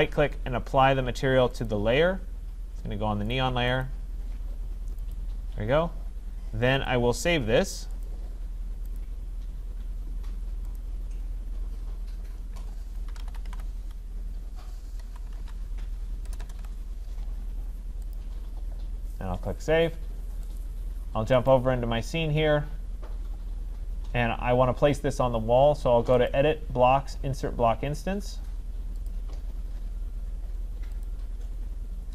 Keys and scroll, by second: 16.2 BackSpace.